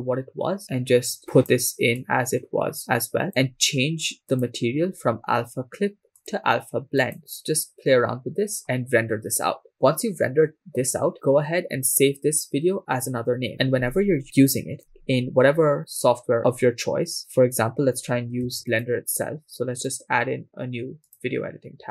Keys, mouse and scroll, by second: 1.1 click, 2.0 click, 4.3-4.7 drag, 4.8-5.4 scroll down 3, 6.1-6.9 scroll down 1, 6.9-9.2 drag, 14.2 scroll down 2, 14.5-15.7 scroll down 1, 18.6 ctrl+s, 18.7 click.